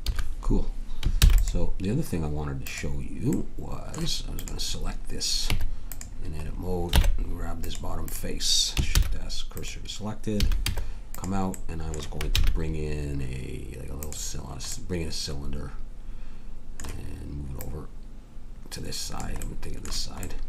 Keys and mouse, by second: 0.0 Escape, 1.2 ctrl+s, 2.6 middle click, 5.5 Tab, 6.9 ctrl+Tab, 8.9 shift+s, 10.4 a, 10.6 Tab, 12.4 shift+a, 17.6-19.4 drag.